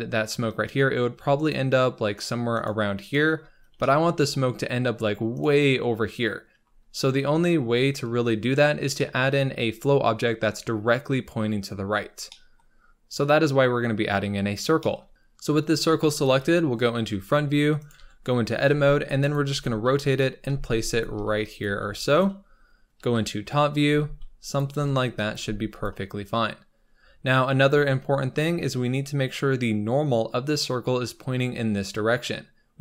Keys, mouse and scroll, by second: 0.0 KP_1, 1.3-3.4 shift+right drag, 3.4-3.7 scroll down 2, 3.7 shift+middle click, 4.4-5.3 scroll down 2, 5.3 shift+right click, 6.8-7.7 scroll up 4, 7.7-8.4 scroll down 4, 8.4-8.9 scroll up 4, 8.9 shift+middle click, 9.3-10.6 scroll up 3, 10.6-12.2 scroll down 2, 12.2 middle click, 12.6-13.2 scroll up 1, 13.2 click, 14.0-14.7 scroll up 4, 14.7-16.3 shift+middle drag, 16.3 KP_1, 17.1 r, 17.9 Tab, 18.6 r, 19.4 g, 20.5 s, 21.1 r, 21.6 g, 23.0 KP_7, 23.8 g, 24.6 r, 25.2 g, 27.5-28.2 scroll up 4, 28.2-32.1 scroll down 1.